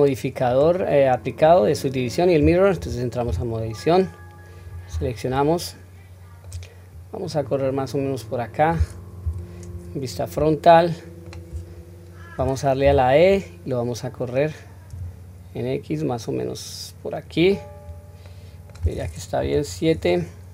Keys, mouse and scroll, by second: 3.3 Tab, 4.9 a, 5.7 middle click, 6.9-8.7 drag, 9.2 KP_1, 9.7 scroll up 2, 10.6-11.5 shift+middle drag, 12.8 e, 17.9-18.2 scroll down 1, 18.2 middle click, 19.4 KP_7, 19.9-20.5 scroll up 1.